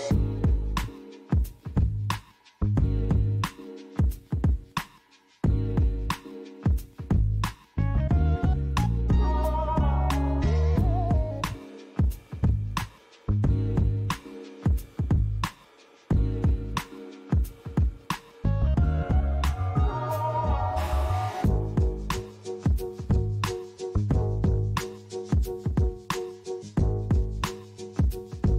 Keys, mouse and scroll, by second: 0.8 alt+click, 3.3 g, 4.1 z, 6.8 click, 7.5 s, 12.2 click, 14.3 Tab, 16.0 click, 16.7 click, 20.3 click, 21.3 right click, 23.1 click, 23.6 middle click, 25.5 click, 26.3 middle click, 28.3 click.